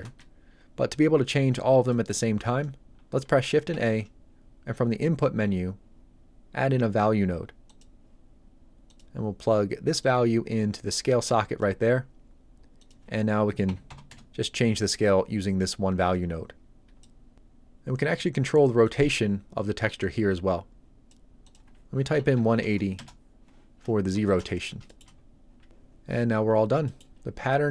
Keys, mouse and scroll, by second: 0.0 click, 1.9 middle click, 3.7 shift+a, 7.7 click, 12.8 click, 13.7 KP_1, 13.9 KP_0, 14.1 Return, 14.9 click, 18.9 click, 22.2 KP_1, 22.4 KP_8, 22.6 KP_0, 23.0 Return, 23.9 scroll up 1, 24.3 shift+middle click, 24.5 ctrl+middle click, 24.6 ctrl+middle click, 24.8 shift+middle click, 26.2 scroll down 1, 26.9 middle click.